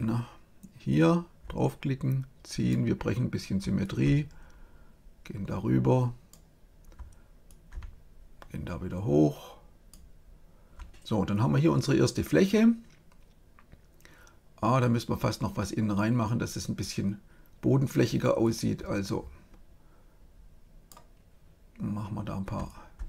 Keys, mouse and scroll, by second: 0.9-2.7 drag, 3.8-5.4 drag, 7.4-9.0 drag, 18.4-20.2 drag, 22.6-23.0 drag.